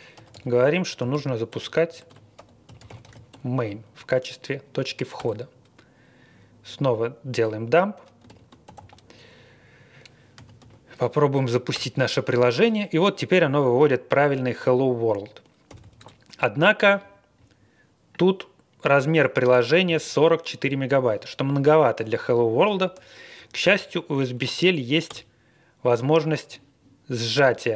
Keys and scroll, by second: 0.0-3.8 typing, 5.1 Return, 5.2 typing, 8.2 ctrl+l, 8.4-10.8 typing, 11.7 Return, 15.7 typing, 16.0 Return, 22.7 ctrl+l, 23.3 Up, 24.3 Up, 25.1 Return.